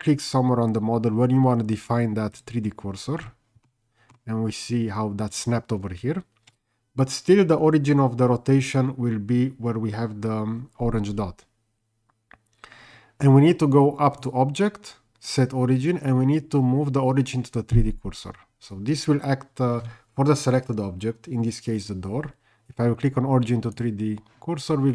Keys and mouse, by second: 2.4 shift+right click, 3.7-4.1 middle drag, 14.2-23.9 drag.